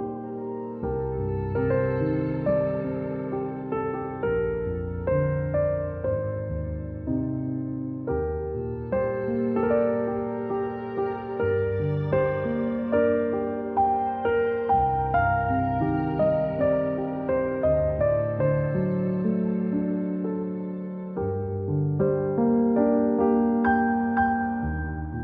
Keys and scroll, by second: 3.2 z, 4.4 space, 4.7 =, 5.1 z, 6.7 a, 9.3 z, 10.7 space, 11.9 -, 13.7 a, 18.1-21.3 typing, 22.4 z, 23.8 space, 23.9 Delete.